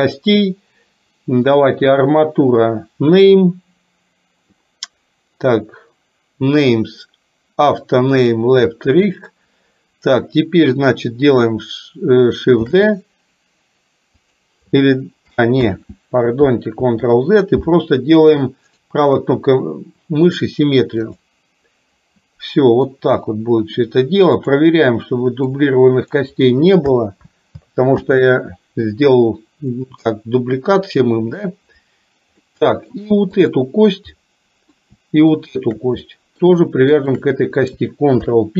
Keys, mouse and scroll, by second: 1.8-8.4 drag, 12.6 shift+d, 15.6 ctrl+z, 18.9-21.4 right drag, 22.9-23.9 middle drag, 24.5 click, 25.5 click, 28.0 ctrl+z, 29.8 middle click, 31.0 middle click, 32.5 middle click, 33.5 click, 34.3 middle click, 35.4 shift+click, 36.0 middle click, 37.0 shift+click, 38.3 ctrl+p.